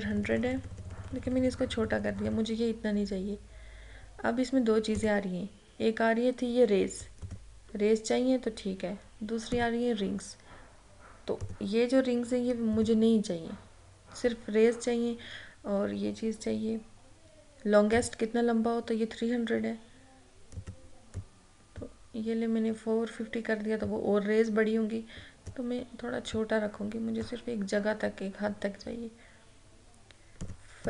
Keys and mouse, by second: 5.1 click, 9.5 click, 18.1 click, 20.7-23.9 drag, 23.9-30.4 drag, 30.5-30.8 drag.